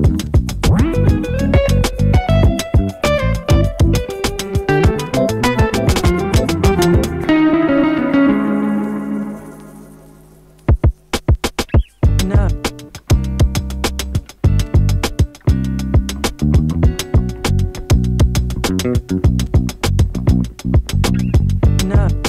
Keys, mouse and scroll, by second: 2.0 click, 10.4 click, 15.5-20.0 drag, 21.2 click.